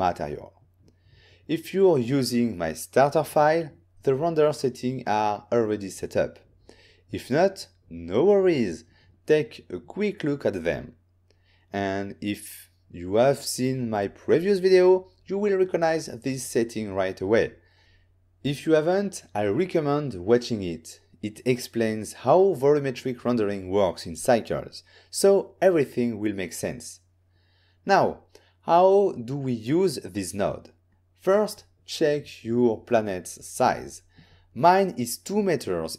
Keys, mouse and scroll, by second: 1.4 click, 7.7 click, 27.7 click, 29.2 click, 31.1 click, 33.9 click, 33.9 n, 34.5 click, 35.6 click.